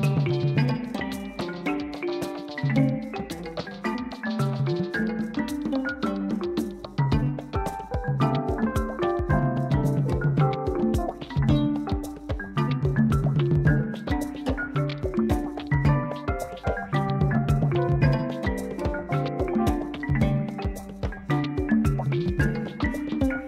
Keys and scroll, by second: 0.2 Tab, 7.7 u, 12.2 g, 12.6 x, 14.9 s, 16.1 Tab.